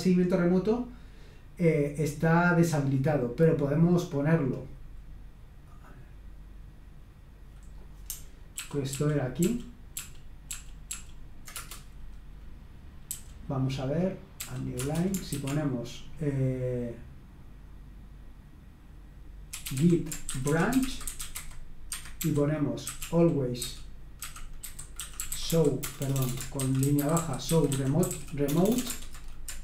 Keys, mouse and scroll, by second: 3.5 click, 7.7 click, 8.6 ctrl+p, 8.9 ctrl+p, 9.4 ctrl+p, 9.9 ctrl+p, 10.5 ctrl+p, 10.9 ctrl+p, 11.6 Return, 13.1 j, 14.4 o, 14.7 Return, 15.3 [, 19.3-29.6 typing, 21.9 Escape.